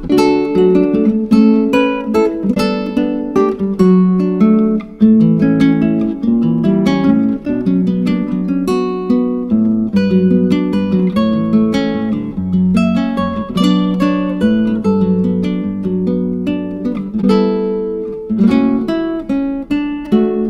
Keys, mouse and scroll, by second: 7.3-8.7 drag, 11.4 click, 14.3 click, 18.5 click, 19.6 click.